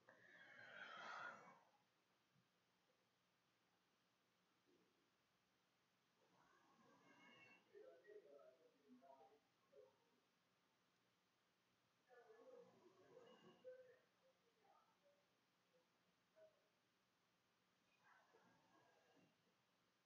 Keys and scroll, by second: 8.7 -, 8.8 =, 8.8 ], 8.9 \, 9.5 shift+Return, 11.1 Return, 11.8-19.5 typing.